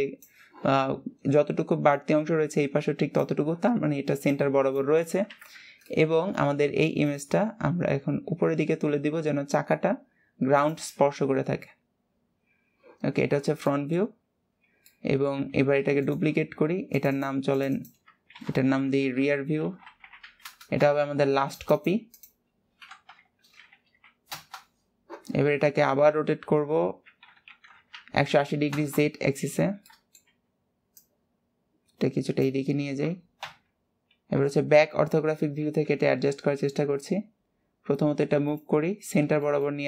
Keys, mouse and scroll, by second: 5.7 scroll down 4, 6.1-7.2 shift+middle drag, 7.2 click, 7.8 scroll up 2, 8.4 g, 11.1-11.6 scroll up 5, 11.6-12.2 scroll down 5, 13.9 middle click, 14.4-15.0 scroll down 6, 15.0 middle click, 15.7 shift+d, 30.0 middle click, 30.5 w, 35.2 scroll up 2, 35.8 g, 39.0 scroll up 2, 39.6 shift+middle click.